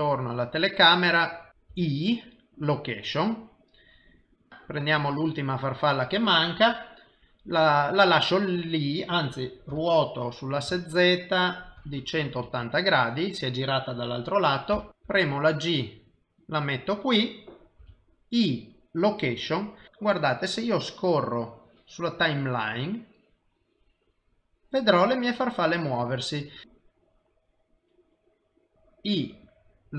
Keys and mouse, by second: 0.0 KP_0, 4.5 click, 5.2 click, 10.1 r, 14.9 click, 15.5 g, 16.2 i, 18.2 i, 20.7 click, 27.5 click, 28.7 g, 28.7 i.